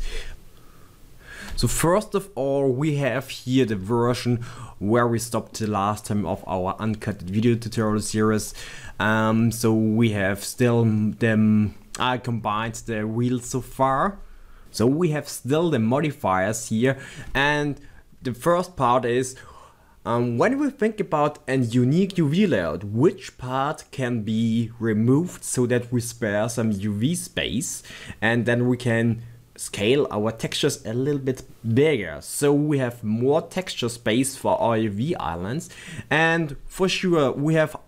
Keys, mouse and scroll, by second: 0.3-10.5 middle drag, 10.5 click, 10.9-21.2 middle drag, 12.2 scroll up 1, 37.2-37.8 middle drag.